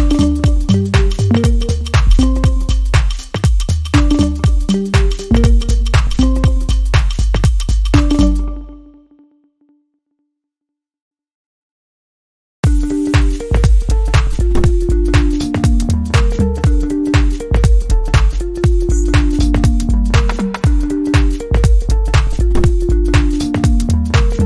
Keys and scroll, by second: 0.7 scroll up 1, 0.8-1.2 scroll down 1, 1.6-1.9 scroll up 1, 2.9 scroll down 1, 8.7-9.6 scroll down 2, 10.1-10.5 scroll up 1, 11.1-11.5 scroll up 1, 13.3-13.7 scroll down 1, 14.3-14.6 scroll up 1, 14.6-14.9 scroll down 1, 15.1-15.6 scroll up 1, 16.1 scroll down 1, 16.7-17.1 scroll up 1.